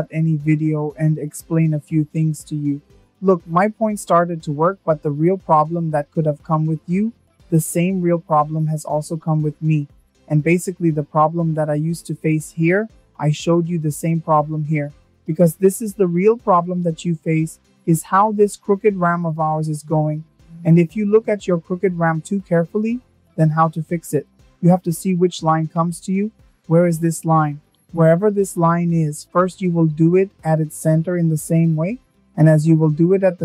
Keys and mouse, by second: 27.4 click.